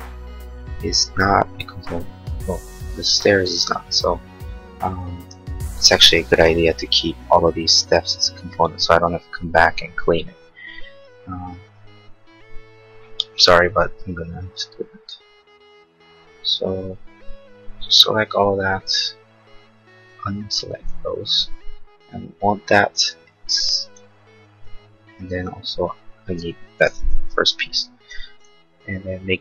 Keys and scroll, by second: 15.1 Delete, 27.7 Delete.